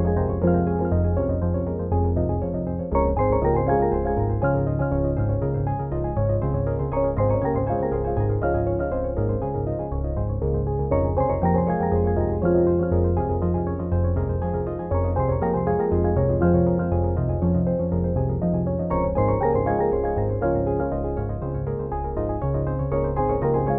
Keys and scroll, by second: 12.2 ctrl+t.